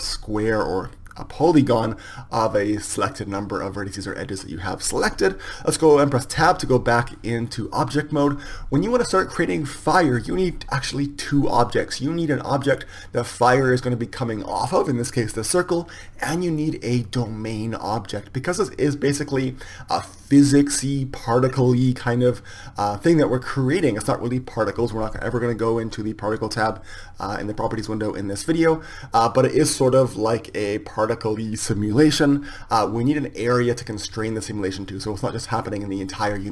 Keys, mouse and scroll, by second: 7.2 Tab.